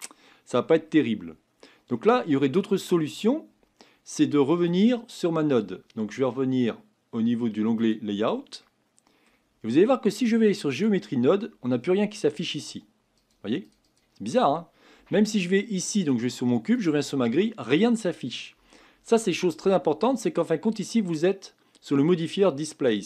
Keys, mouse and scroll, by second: 1.3-2.0 scroll down 4, 2.0-4.8 middle drag, 4.8 click, 7.8 click, 8.7-10.7 middle drag, 10.7 click, 13.3 click, 15.2 click, 16.1 click, 16.8 click.